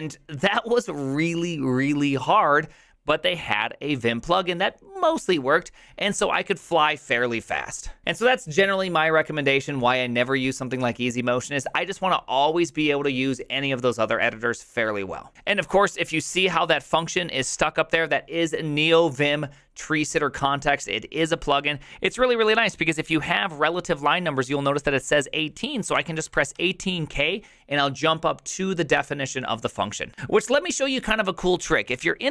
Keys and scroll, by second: 25.8-27.2 typing, 31.9 j.